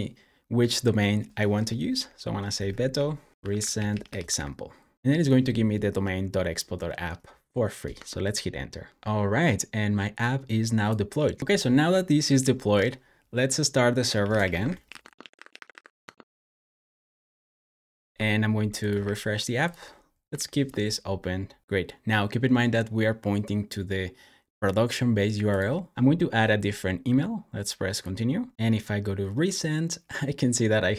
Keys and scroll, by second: 2.1-4.7 typing, 13.9-16.0 typing, 18.9 r, 20.2 super+j, 25.9 typing.